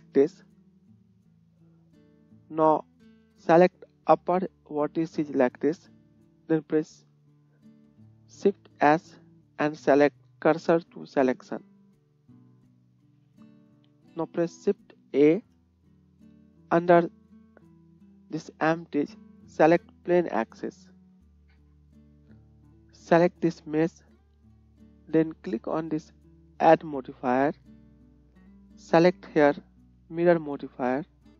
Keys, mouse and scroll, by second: 2.6-8.7 drag, 2.6 middle click, 2.6 right click, 8.6 shift+s, 11.6 click, 12.6 Tab, 15.2 shift+a, 23.3-27.6 drag, 27.6-31.3 middle drag.